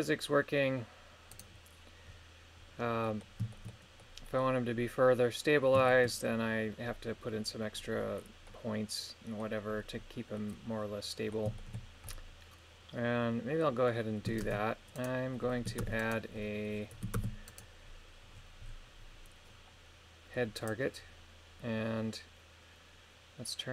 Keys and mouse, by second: 1.3 right click, 3.0 middle click, 3.5 shift+middle click, 4.0 middle click, 5.9 shift+middle click, 8.4 middle click, 10.3 middle click, 11.6 shift+middle click, 12.1-13.6 middle drag, 14.4 shift+space, 14.9 right click, 15.7 ctrl+Tab, 16.0 right click, 17.1 ctrl+Tab, 17.4 right click, 20.5 click.